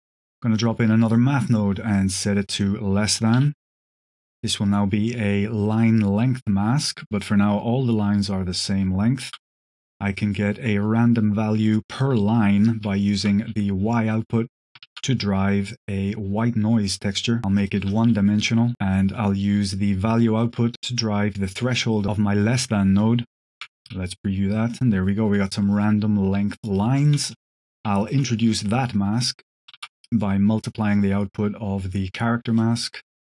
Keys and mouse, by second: 1.8-2.6 drag, 3.0 click, 4.5-9.2 shift+drag, 9.4 click, 10.1-11.7 drag, 11.8 click, 12.1 click, 12.8 ctrl+shift+click, 14.7 shift+a, 16.2 click, 16.8 click, 17.2-17.6 drag, 17.8-18.7 drag, 19.1 click, 19.9-21.6 drag, 21.9-22.9 drag, 24.4 click, 24.4 middle click, 25.5 click, 25.5 middle click, 26.9 ctrl+shift+click, 27.9 ctrl+shift+click, 29.5 click, 29.5 middle click, 29.7 shift+d, 30.0 click, 31.2-32.5 drag.